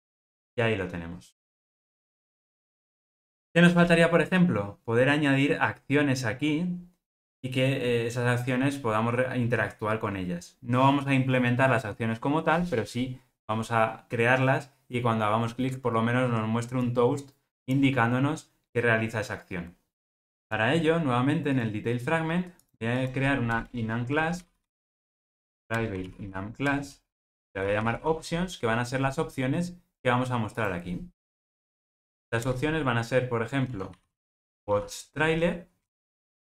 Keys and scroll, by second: 25.7 Return.